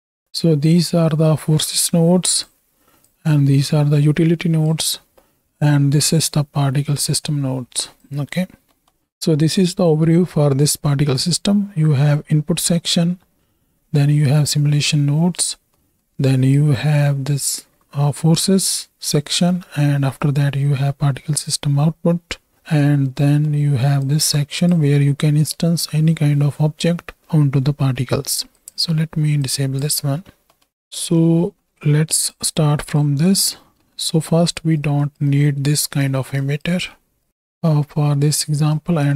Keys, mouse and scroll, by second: 0.7-2.4 drag, 3.1-4.7 drag, 5.3 middle click, 6.2-8.1 drag, 8.8 middle click, 10.9 middle click, 15.8 middle click, 16.6 click, 23.0 middle click, 24.2-24.7 drag, 28.7-29.9 drag, 30.5 middle click, 32.2 click, 32.8 click, 33.3 click, 33.7 click, 34.8 right click, 35.3 right click, 36.4 ctrl+right click, 37.3 right click, 37.7 middle drag, 38.3 middle drag, 38.7-39.1 right drag.